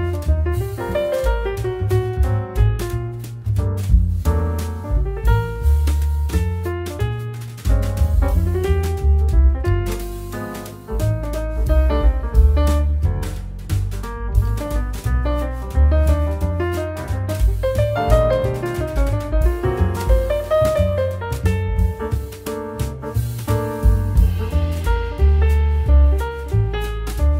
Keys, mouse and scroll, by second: 1.5 click, 1.7 click, 1.9 click, 2.2 scroll up 2, 2.6 click, 4.2 s, 5.0 g, 6.0 g, 7.3 s, 8.8-9.2 scroll down 5, 9.2 middle click, 10.2 click, 10.6 scroll down 5, 10.9-11.6 scroll up 3, 11.6 g, 13.3 click, 13.4 middle click, 13.7-14.1 scroll down 7, 14.1 middle drag, 14.4 scroll up 3, 14.5 middle drag, 14.8 scroll down 2, 16.4 click, 17.7 x, 18.3 click, 18.7 scroll up 1, 19.4 middle click, 20.4 click, 20.7-21.7 scroll up 5, 21.7 click, 22.2-22.8 scroll up 8, 22.8 middle click, 23.0-23.5 scroll down 2, 23.5 x, 23.5 shift+a, 25.0-27.3 drag.